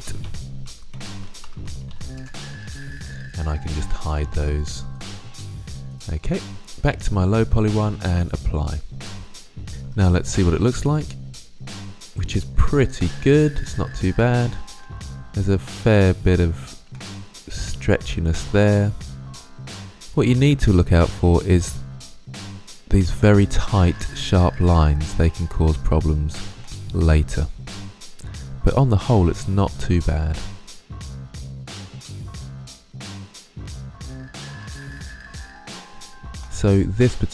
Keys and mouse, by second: 3.9-5.5 drag, 5.8-9.7 drag, 9.7 Tab, 10.1 click, 14.3-14.9 middle drag, 16.7-19.2 middle drag, 19.3-29.3 middle drag, 33.0-35.6 middle drag.